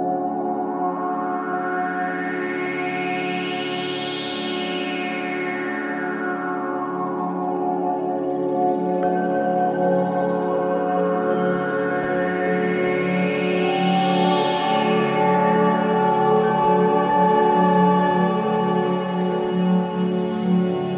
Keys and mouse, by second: 0.3-1.5 drag, 3.6 click, 4.9-6.3 drag, 7.3-8.6 drag, 9.8-11.0 drag, 12.2-13.3 drag, 14.7-17.7 drag, 20.6 click.